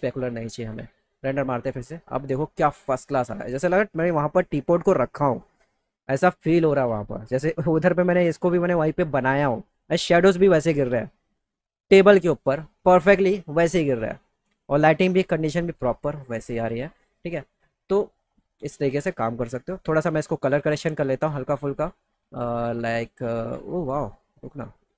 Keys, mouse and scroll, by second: 0.6 click, 2.8 middle click, 5.0 middle click, 19.6 click, 20.8 click, 21.1 click, 22.3-24.4 drag.